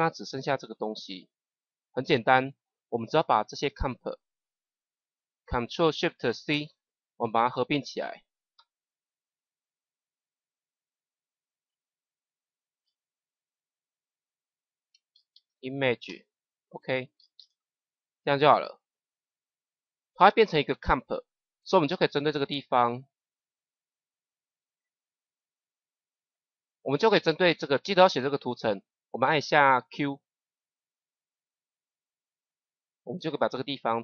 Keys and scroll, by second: 6.4 ctrl+shift+c, 12.3-13.3 typing, 14.6-17.8 typing, 29.8 q.